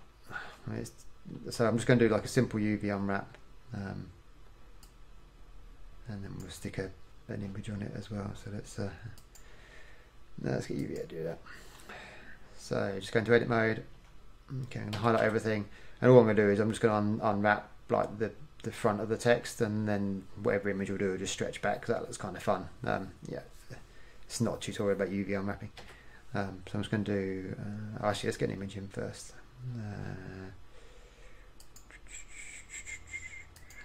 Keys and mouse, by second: 0.6 KP_1, 6.1 click, 9.4-11.3 drag, 14.2 Tab, 15.1 a, 15.4 a, 26.0 u, 31.8-33.7 drag.